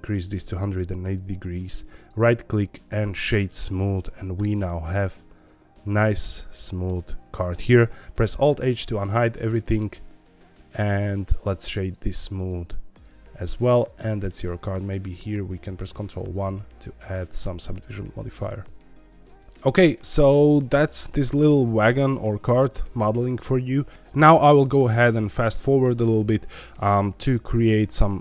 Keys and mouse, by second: 4.6-6.8 middle drag, 8.2 alt+h, 8.7 click, 9.1 shift+middle click, 11.4 shift+click, 13.5 middle click, 14.7 click, 15.8 ctrl+1, 18.7 middle click, 19.3 shift+middle click.